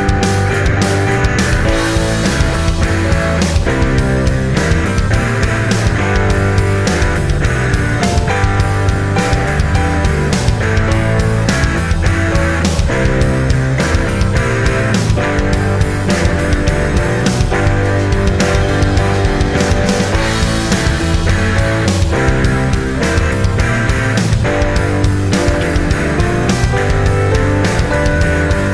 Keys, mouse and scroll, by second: 21.7 click.